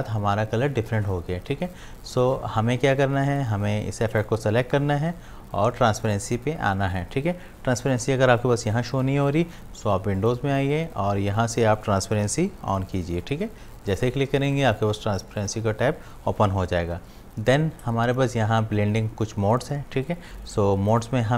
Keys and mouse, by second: 2.1 click, 8.9 click, 13.9 click, 20.9 click.